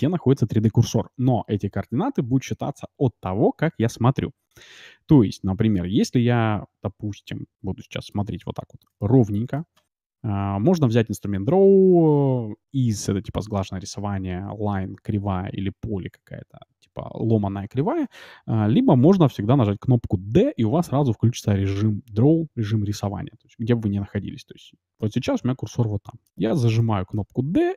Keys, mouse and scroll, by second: 4.8-5.7 scroll down 1, 5.7-7.5 middle drag, 8.3-9.0 scroll up 1, 9.0-11.0 middle drag, 25.0-27.3 middle drag, 27.3 d.